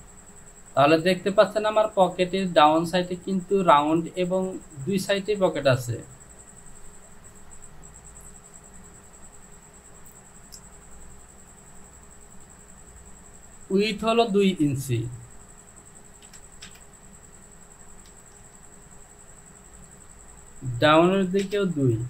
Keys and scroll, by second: 16.5 KP_2, 16.7 Return.